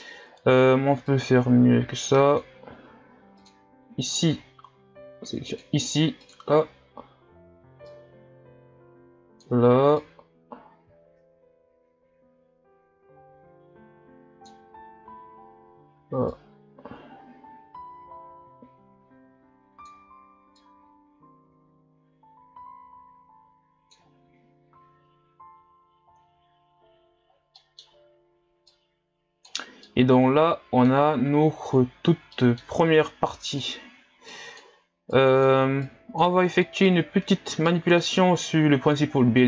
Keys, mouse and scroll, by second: 3.4 click, 24.3-24.7 scroll down 1, 24.7 Delete, 24.8-25.3 scroll up 1, 25.3-26.2 scroll down 2, 28.7-29.9 drag, 29.9-33.3 middle drag, 33.3-39.4 drag.